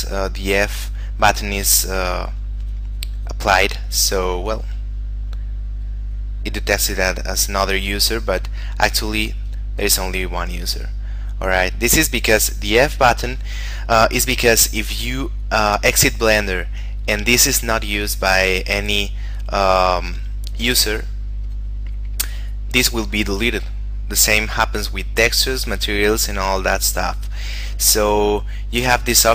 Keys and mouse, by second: 4.5 click, 9.2 click, 18.3 click, 21.9 click.